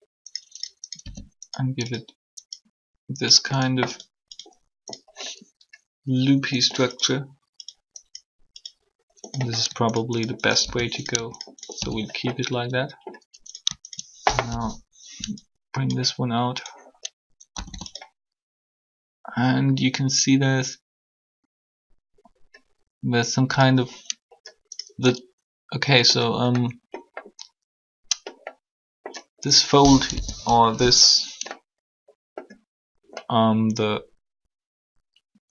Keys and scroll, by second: 14.4 shift+1, 17.5 typing, 30.0 1.